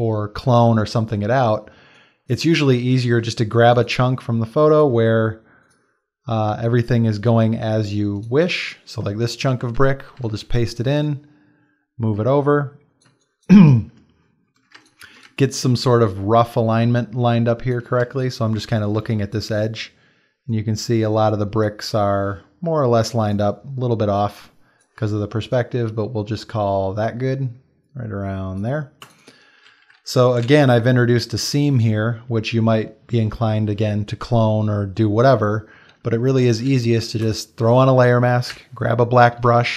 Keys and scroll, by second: 1.8 space, 9.5 ctrl+c, 9.8 ctrl+v, 10.2 ctrl+t, 13.1 space, 14.7 space, 18.0 space, 19.0 space, 30.4 space, 38.5 b.